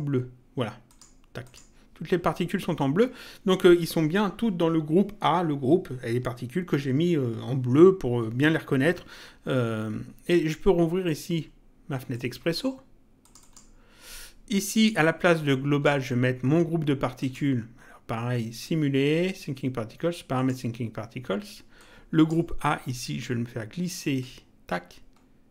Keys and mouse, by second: 0.9 click, 12.1 click, 13.2 click, 15.3 click, 17.1 click, 20.3 click, 21.7 click, 24.1 click.